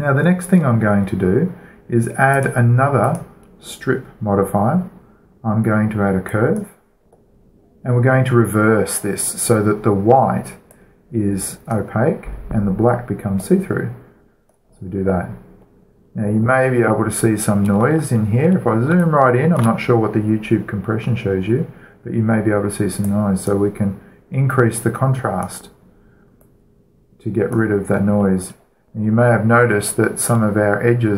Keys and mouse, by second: 0.2-2.2 middle drag, 2.7-5.2 drag, 6.6-8.5 drag, 8.4-9.6 middle drag, 11.1-16.6 drag, 16.6-21.6 middle drag, 23.4-29.8 drag, 29.8-31.1 middle drag.